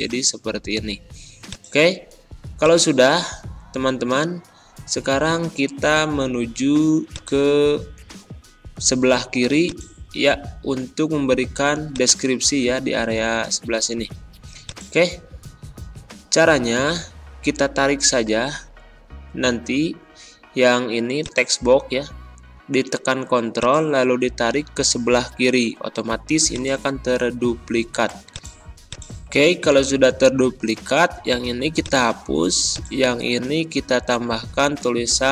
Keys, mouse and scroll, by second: 4.1-4.5 scroll down 2, 7.0 click, 7.8 scroll up 1, 12.6 ctrl+scroll up 1, 14.6-18.8 drag, 18.8 ctrl+scroll down 1, 20.2 ctrl+scroll down 1, 21.1 click, 23.5-26.4 ctrl+drag, 27.4 ctrl+a, 28.2-30.4 drag, 30.4 BackSpace, 31.7 click, 33.9-35.3 typing.